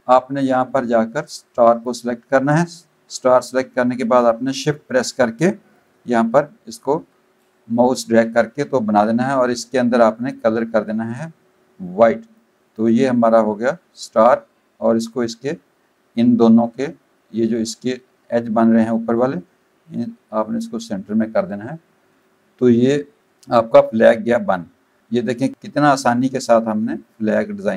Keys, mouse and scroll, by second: 0.2 click, 1.1 click, 5.7 shift+click, 10.2 click, 12.2 click, 12.7 click, 13.9 click, 19.2 click, 22.1 click, 23.2 click, 23.8 v, 24.2 click, 24.6 click, 26.3 alt+shift+click.